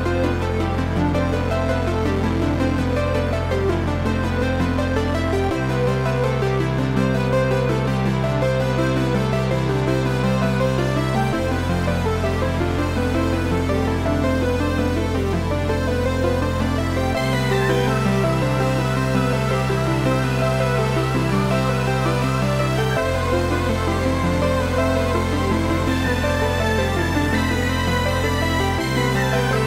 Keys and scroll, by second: 1.9 Left, 3.4 Down, 4.1 Up, 5.1 Right, 14.6 Right.